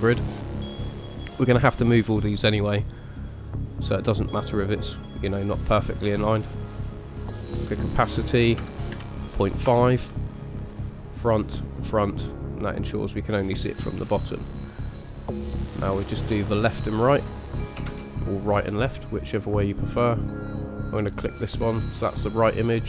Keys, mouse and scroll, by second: 0.3 middle click, 6.6 click, 7.1 click, 11.0 click, 11.6 click, 12.2 middle click, 15.6 middle click, 17.8 shift+a.